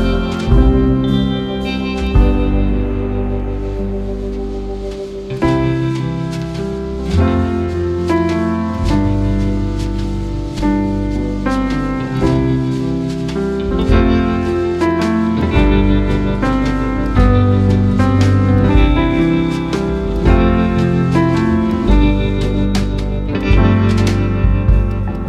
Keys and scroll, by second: 6.7 ctrl+a, 7.2 ctrl+c, 10.5 ctrl+v.